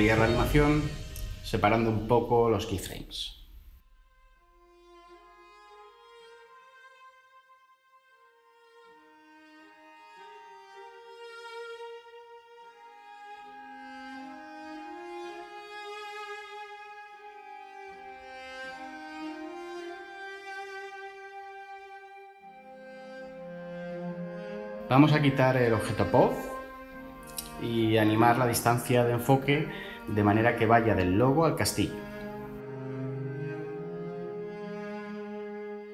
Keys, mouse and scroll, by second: 27.7 5, 27.9 Return, 29.3 typing, 29.5 Return, 34.5 typing, 34.7 Return.